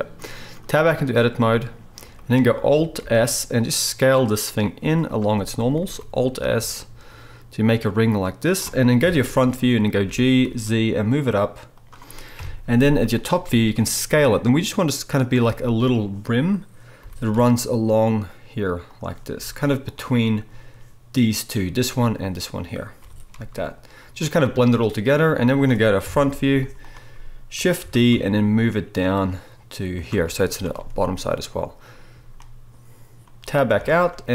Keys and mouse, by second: 0.8 Tab, 3.0 alt+s, 4.8 z, 5.3 shift+click, 5.8 alt+s, 9.0 KP_1, 10.0 g, 12.4 KP_7, 12.8 z, 14.1 s, 17.0 g, 19.3 s, 23.0 g, 26.0 KP_1, 26.5 z, 27.8 shift+d, 30.2 z, 33.8 Tab.